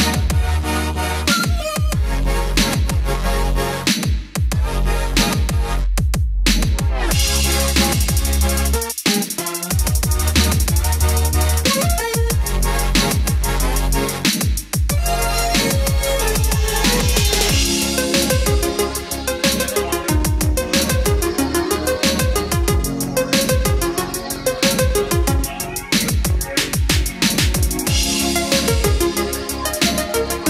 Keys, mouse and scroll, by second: 0.5 BackSpace, 2.5 KP_4, 9.1 Return, 12.5 click, 16.0 middle click, 17.6 click, 18.0 middle click, 19.9-21.7 drag.